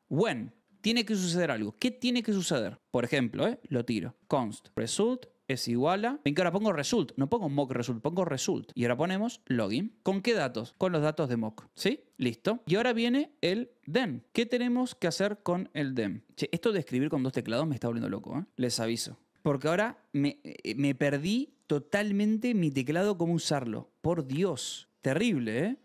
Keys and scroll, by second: 0.3 a, 0.6 BackSpace, 3.8-5.9 typing, 8.8-11.6 typing, 11.6 Escape, 12.8 u, 14.3 Escape, 14.5 v, 14.9 u, 15.9 Escape, 15.9 c, 18.5 Escape, 18.5-20.1 typing, 21.3 j, 21.8 k, 22.6 j, 23.2 a, 25.2 Escape, 25.2 v, 25.7 u.